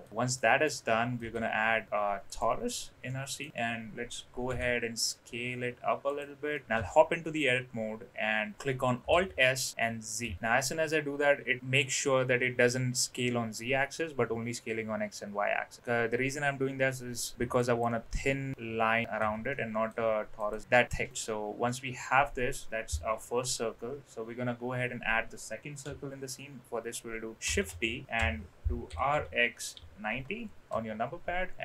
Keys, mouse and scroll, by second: 0.3 middle click, 1.2 shift+a, 3.0 middle click, 4.4 s, 6.5 middle click, 6.7 Tab, 9.1 alt+s, 18.1 middle click, 19.1 Tab, 19.4-19.8 middle drag, 20.6 right click, 21.6-22.5 middle drag, 23.2 KP_1, 27.4 shift+d, 28.8 r.